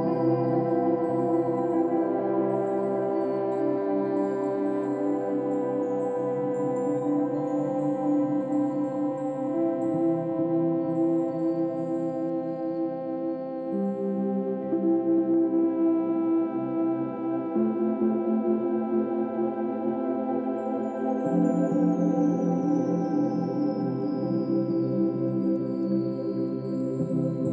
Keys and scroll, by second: 3.3 space, 3.6 space, 16.7 ctrl+z.